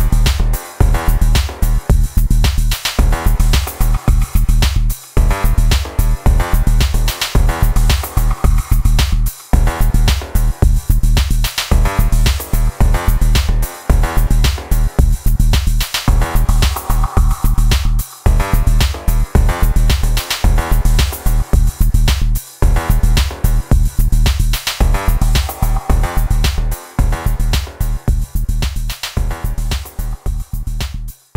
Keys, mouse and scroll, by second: 0.0 middle click, 0.0 click, 0.1 ctrl+middle click, 0.3 right click, 0.3 d, 0.3 right click, 0.3 click, 0.6 middle click, 0.8 right click, 0.8 d, 1.0 click, 1.1 s, 1.1 click, 1.2 middle click, 1.3 click, 2.8 click, 3.0 click, 3.2 click, 3.5 click, 4.0 click, 4.2 click, 4.5 click, 4.7 click, 4.9 click, 5.1 middle click, 5.8 click, 6.1 click, 6.7 click, 7.4 click, 7.5 click, 7.6 click, 7.9 alt+click, 8.3 alt+click, 8.5 click, 8.8 click, 8.9 click, 9.1 i, 9.2 d, 9.3 click, 9.6 middle click, 9.7 click, 9.8 middle click, 9.9 s, 9.9 click, 10.1 middle click, 10.1 click, 10.3 click, 10.3 click, 10.7 alt+click, 10.9 click, 11.1 click, 11.4 alt+click, 11.7 ctrl+a, 12.0 click, 12.2 click, 12.9 click, 13.3 click, 13.7 click, 14.8 click, 14.9 click, 14.9 right click, 15.5 click, 15.5 click, 15.7 click, 15.9 ctrl+r, 15.9 click, 16.4 c, 16.4 click, 16.4 right click, 16.5 ctrl+middle click, 16.9 alt+click, 17.3 click, 17.7 click, 17.9 click, 18.2 click, 18.4 click, 18.6 click, 18.8 click, 19.1 click, 19.4 shift+click, 20.7 click, 20.8 shift+middle click, 21.0 click, 21.1 middle click, 21.3 alt+click, 21.6 click, 21.8 alt+click, 22.1 alt+click, 22.5 click, 22.5 click, 23.2 click, 23.5 click, 24.1 click, 24.5 ctrl+r, 24.6 click, 24.6 click, 25.0 click, 25.4 middle click, 26.0 click, 26.5 click, 26.7 scroll down 3, 27.0 click, 27.2 click, 27.2 click, 27.7 click, 28.0 click, 28.5 shift+middle click, 28.6 click, 28.7 click, 29.0 click, 29.0 click, 29.2 click, 29.3 click, 29.5 click, 29.7 ctrl+middle click, 29.9 shift+middle click, 30.0 click, 30.0 click, 30.3 click, 30.5 click, 30.7 click, 30.9 click, 31.2 click.